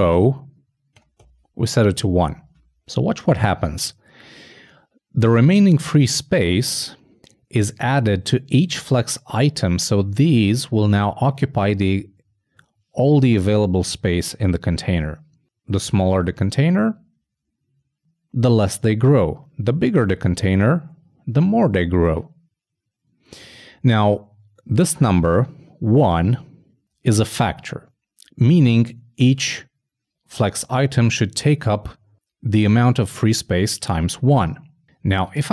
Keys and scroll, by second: 0.0-0.6 typing.